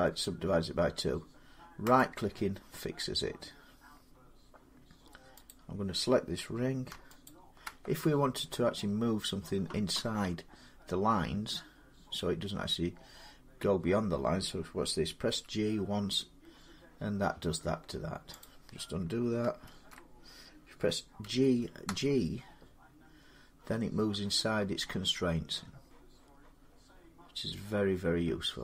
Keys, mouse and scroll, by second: 1.8 right click, 5.3 click, 7.1 alt+click, 11.9 alt+click, 15.1 g, 18.2 click, 19.5 ctrl+z, 21.1-21.7 typing, 21.7-24.7 drag.